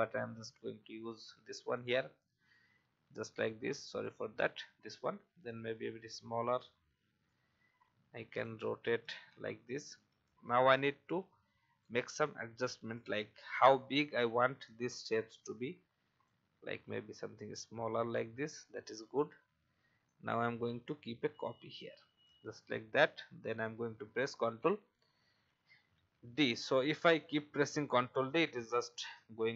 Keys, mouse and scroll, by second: 0.6 Right, 1.7-4.8 drag, 5.8 shift+click, 9.0-9.4 alt+scroll down 1, 10.8 click, 13.6 alt+scroll up 1, 15.4 shift+click, 17.5-17.8 alt+scroll up 1, 18.8-19.3 alt+scroll down 1, 20.0-21.8 alt+drag, 22.4 alt+scroll down 1, 23.3 alt+scroll down 1, 24.4-27.4 typing.